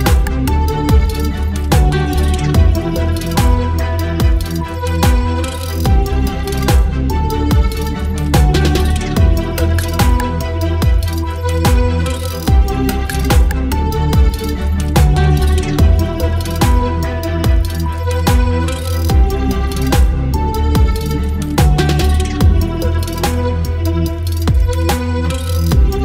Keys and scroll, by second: 8.8 space, 9.4 space, 9.9 ctrl+space, 10.2 ctrl+t, 14.3 space, 18.9 Return, 20.0 space.